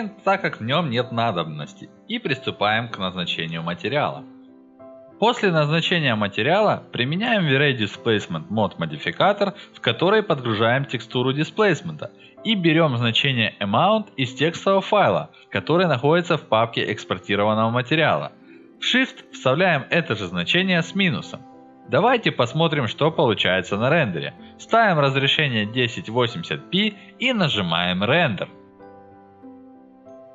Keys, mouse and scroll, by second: 0.4 click, 0.8 alt+middle click, 1.1 alt+middle click, 1.8 middle click, 2.6 ctrl+alt+middle click, 2.9 alt+middle click, 4.4 click, 4.8 click, 6.1 middle click, 6.9 F4, 6.9 click, 7.1-7.7 drag, 8.1 click, 8.4 alt+middle click, 8.9 click, 9.2 click, 10.3 click, 11.7 click, 12.2 click, 13.4 click, 13.7 click, 14.6 click, 15.5-16.2 typing, 16.4 click, 18.2 middle click, 18.5 alt+middle click, 19.3 middle click, 20.6 click, 20.8 scroll up 2, 21.2 scroll down 2, 21.5 middle click, 21.7 middle click, 22.4 click, 22.7-23.9 drag, 25.3 click, 27.2 click, 27.6 middle click, 28.1 alt+middle click, 28.3 ctrl+alt+middle click, 28.7 alt+middle click, 28.8 ctrl+alt+middle click, 29.4 middle click, 29.5 alt+middle click, 29.9 middle click.